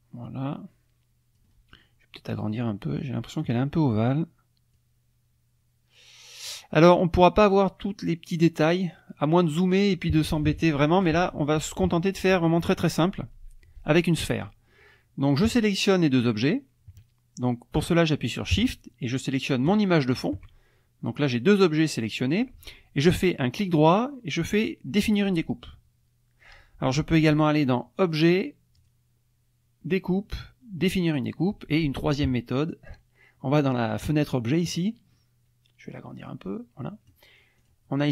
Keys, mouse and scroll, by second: 2.5 click, 4.7-6.7 drag, 19.7 shift+click, 23.5 right click, 28.0 click, 28.8 click, 34.2 click, 36.2 click, 37.6 click.